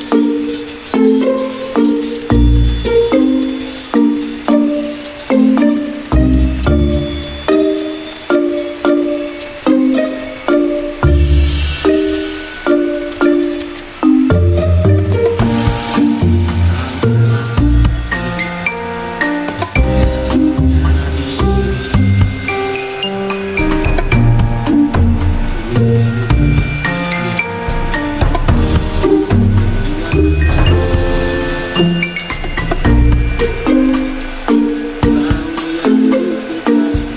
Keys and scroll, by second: 3.1 v, 9.7 a, 18.5 v.